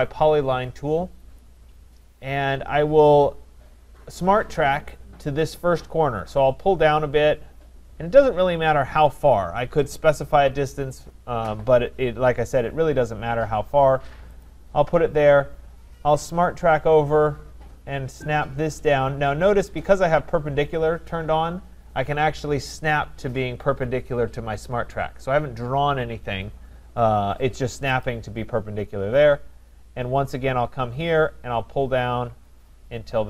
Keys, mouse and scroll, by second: 1.4 click, 14.4 click, 28.0 click.